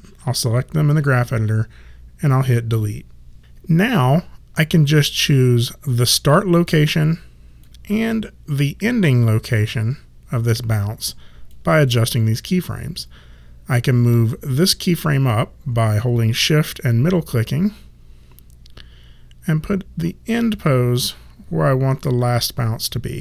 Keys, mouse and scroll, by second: 2.7 Delete, 3.9 click, 7.6 click, 11.5 click, 14.2 shift+middle click.